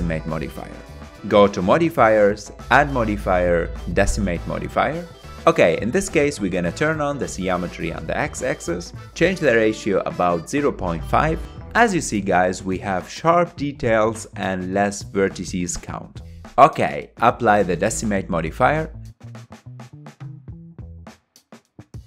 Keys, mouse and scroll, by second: 0.3 click, 1.1-4.1 drag, 7.2-14.6 drag, 15.4-16.4 scroll up 6, 16.4-17.4 middle drag, 17.4-19.7 drag, 20.6-22.0 middle drag.